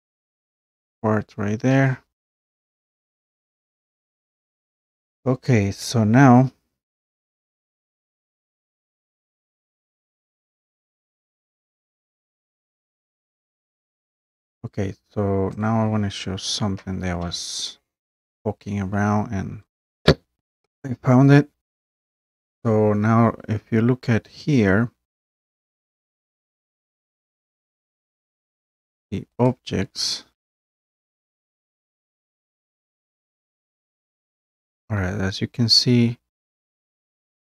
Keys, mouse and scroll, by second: 0.1 click, 3.0 click, 4.1 click, 6.0 click, 9.0 click, 15.8 click, 19.8 click, 20.7 click, 23.8-25.7 drag, 29.5 click, 33.3-33.7 scroll down 2, 34.2-34.7 scroll up 3, 36.0 scroll up 1, 36.5 scroll.